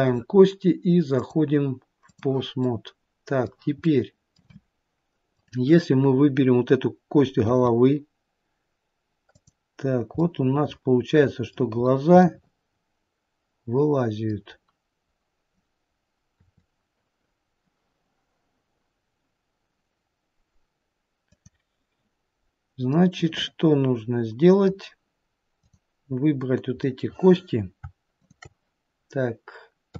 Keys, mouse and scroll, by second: 2.9 middle click, 4.1 middle click, 5.6 click, 7.7 r, 10.5 middle click, 12.1-13.4 scroll up 4, 12.5 middle click, 14.7-15.3 scroll down 1, 15.3-15.6 scroll down 1, 16.6 r, 23.2 middle click, 25.8 click, 27.1 middle click, 28.4 shift+click.